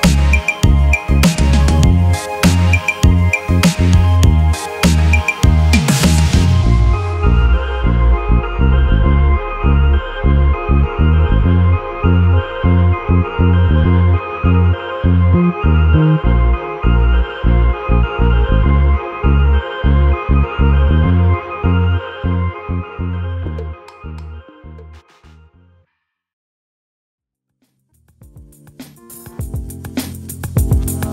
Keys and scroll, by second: 4.9 alt+Delete, 7.9 space.